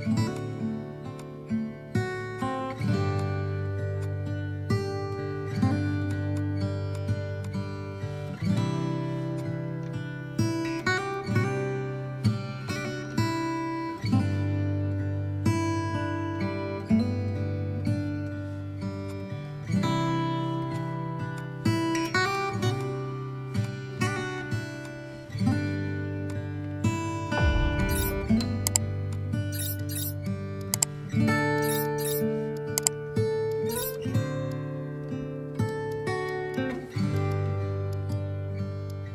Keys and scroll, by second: 7.4 space.